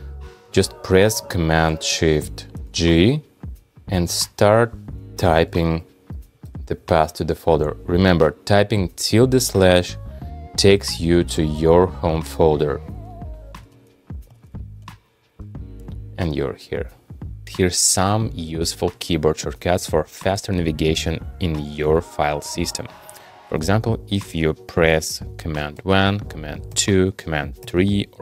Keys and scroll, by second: 2.5 shift+super+g, 15.8 shift+super+g, 25.8 super+1, 26.7 super+2, 27.6 super+3.